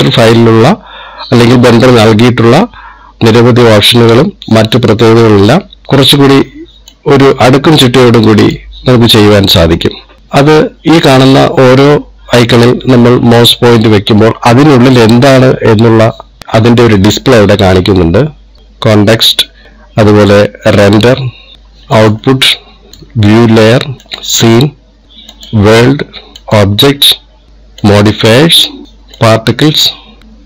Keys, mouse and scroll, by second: 7.6 click, 19.6 click, 21.5 click, 22.7 click, 23.6 click, 24.8 click, 26.0 click, 27.1 click, 28.5 click, 29.9 click.